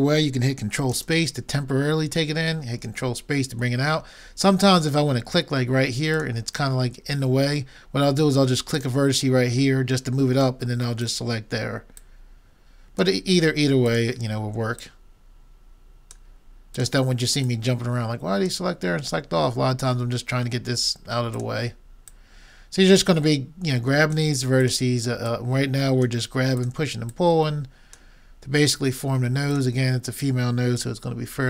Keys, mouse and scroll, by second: 1.0 ctrl+space, 6.1-8.0 drag, 8.8-10.6 drag, 11.0-13.6 drag, 13.8-16.6 drag, 16.8-19.2 drag, 21.4-23.7 drag, 24.6-28.9 drag, 29.6-31.3 drag.